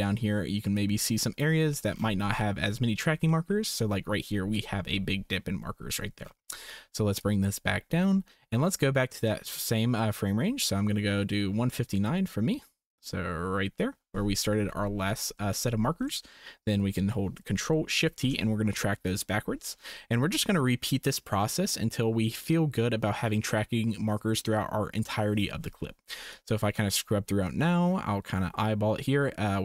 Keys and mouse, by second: 0.8 click, 1.7 click, 3.2 click, 7.2-8.5 drag, 9.5-13.8 drag, 15.5 shift+click, 18.1 ctrl+shift+t, 26.3-29.6 drag.